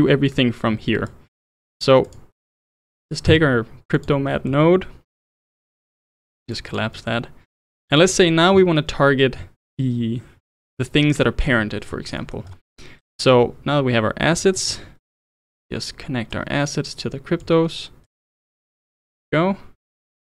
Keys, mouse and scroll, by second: 1.0 ctrl+right click, 1.4-2.1 middle drag, 2.1 click, 3.3 shift+d, 4.3-5.4 middle drag, 5.4 click, 6.1 click, 6.5 click, 6.9-7.6 middle drag, 7.6 click, 11.9 scroll up 1, 12.2-12.5 middle drag, 12.5 scroll up 2, 13.1-14.4 drag, 14.4-16.3 middle drag, 16.3 click, 18.1 click, 19.3 click, 20.2 click.